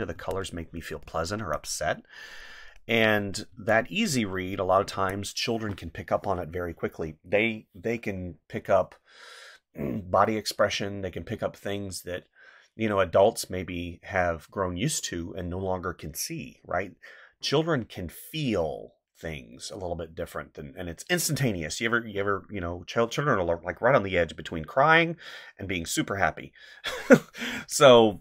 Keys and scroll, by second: 0.1 space, 1.4 space, 3.5 space, 4.9 space, 27.5 space.